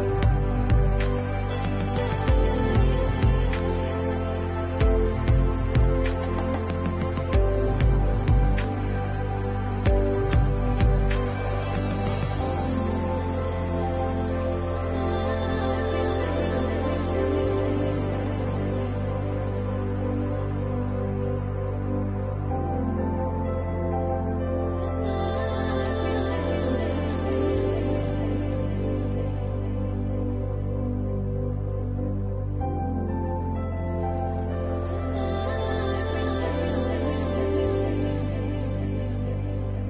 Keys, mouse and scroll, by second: 0.1 shift+click, 0.5 scroll down 3, 1.0 shift+middle click, 2.5 shift+middle click, 2.8 middle click, 5.2 middle click, 5.4 shift+middle click, 6.4 alt+shift+click, 7.9 alt+shift+click, 8.6 middle click, 12.1 shift+click, 13.2 right click, 15.4 shift+middle click, 15.8 middle click, 17.3 shift+middle click, 17.7 middle click, 19.1 a, 20.0 u, 20.3 u, 21.2-21.9 scroll up 5, 21.9 shift+middle click, 22.8 scroll up 1, 23.5-24.5 scroll down 4, 24.5 Tab, 25.4 shift+middle click, 27.4 click, 28.7 Tab, 29.7 a, 31.1 alt+h, 31.6 a.